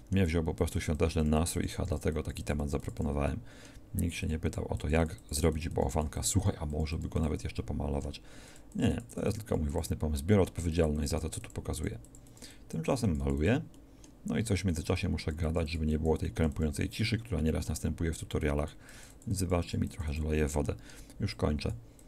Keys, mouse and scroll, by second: 3.3 middle click.